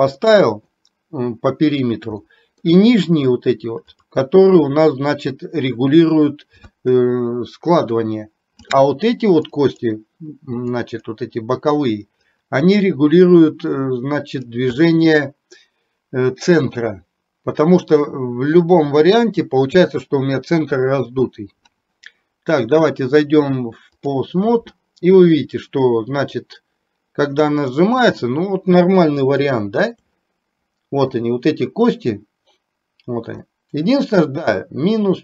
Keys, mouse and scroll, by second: 0.4 middle click, 2.3 middle click, 4.1 click, 9.6 click, 11.0 click, 12.4-14.6 drag, 23.0-24.3 drag, 26.5-28.1 drag, 29.5 shift+middle click, 33.6-35.2 middle drag.